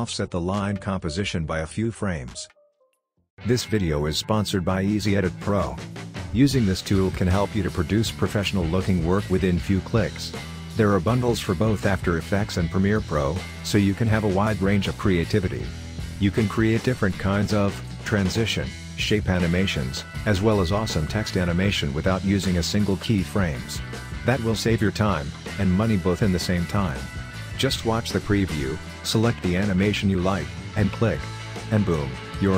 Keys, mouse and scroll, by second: 1.7 drag, 2.8 ctrl+z, 3.2 click.